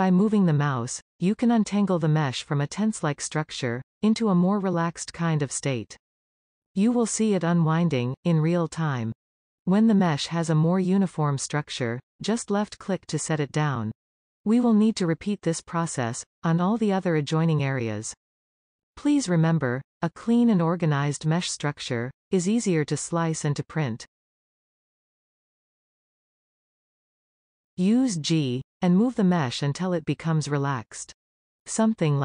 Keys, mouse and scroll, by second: 0.1 g, 12.8-16.1 middle drag, 16.1 scroll up 2, 16.5-17.9 middle drag, 17.9 click, 18.9 g, 20.4-21.0 scroll down 2, 21.0-23.7 middle drag, 24.8-27.5 shift+middle drag, 27.5 click, 28.2 g, 30.6-31.7 middle drag, 31.7 click, 31.9 g.